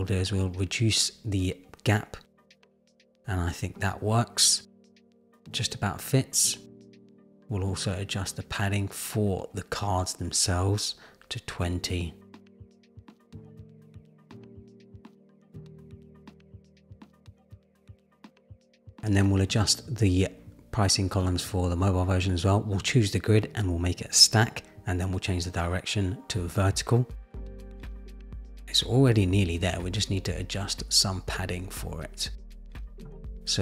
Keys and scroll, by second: 1.0 shift+Down, 4.8 super+-, 6.6 super+=, 9.6 shift+Down, 12.4 shift+Down, 14.7 shift+Down, 16.3 super+-, 32.7 shift+Up.